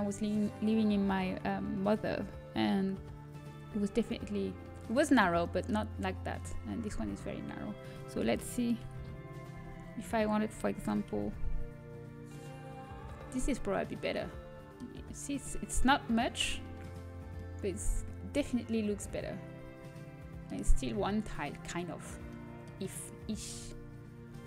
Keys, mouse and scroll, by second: 6.6-8.7 middle drag, 8.7 Tab, 9.0 a, 9.7 x, 10.7 s, 15.7 KP_7, 22.9 middle click, 23.5 KP_1.